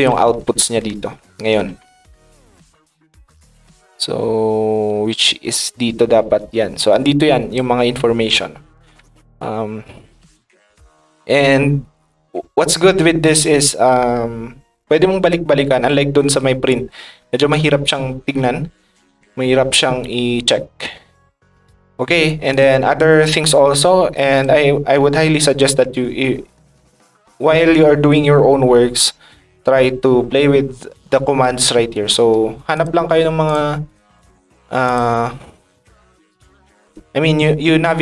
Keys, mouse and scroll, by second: 6.4-7.5 ctrl+drag, 22.5 click, 24.3 click, 32.7 click, 33.4 click, 33.8 click, 34.1 click, 34.8 click, 36.2 click, 36.3 click.